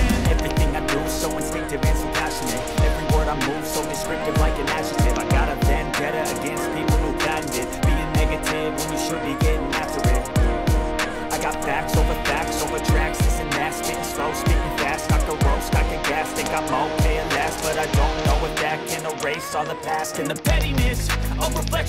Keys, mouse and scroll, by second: 18.3 click, 19.3 click, 20.4 click, 21.7 click.